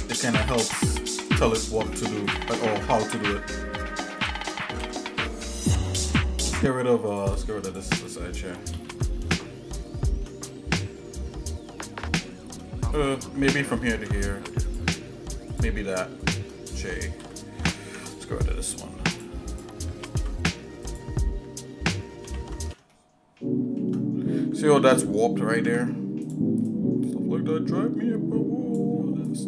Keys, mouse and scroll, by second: 0.5 scroll up 1, 1.5 click, 2.2 shift+click, 2.9 shift+middle click, 4.8 j, 4.8 shift+click, 5.6 ctrl+Tab, 7.6 click, 8.7 ctrl+x, 9.4 shift+middle click, 10.5 middle click, 11.9 shift+middle click, 13.9 ctrl+Tab, 15.5 click, 16.2 shift+click, 17.2 j, 17.8 ctrl+Tab, 19.5 click, 20.0 ctrl+z, 20.8 click, 22.2 ctrl+x, 22.9 shift+middle click, 25.5 ctrl+Tab, 26.6 click, 27.0-28.8 drag.